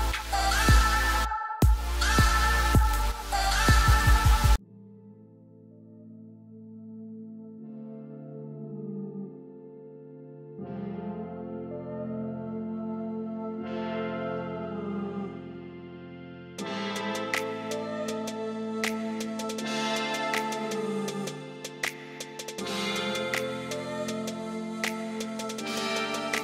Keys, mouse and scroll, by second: 11.1 right click, 12.3 right click, 22.3 right click.